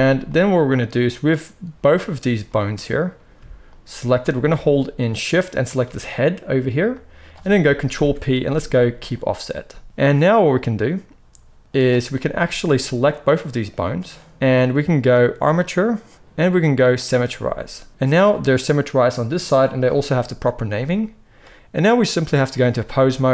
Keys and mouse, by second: 1.9-3.6 middle drag, 3.6 shift+click, 3.7-5.3 shift+middle drag, 5.3 shift+click, 5.5-13.4 shift+middle drag, 7.8 ctrl+p, 13.4-18.4 drag, 18.4-20.4 middle drag, 20.4 click, 20.5-22.0 middle drag, 22.0-23.3 drag.